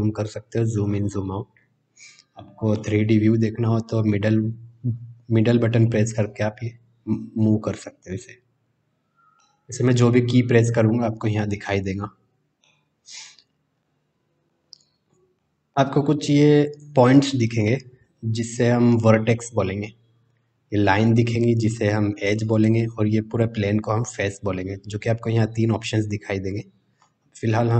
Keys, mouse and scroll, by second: 2.7-9.3 middle drag, 12.6-13.1 middle drag, 13.8-14.5 middle drag, 15.3 middle click, 16.7 click, 17.6 middle click.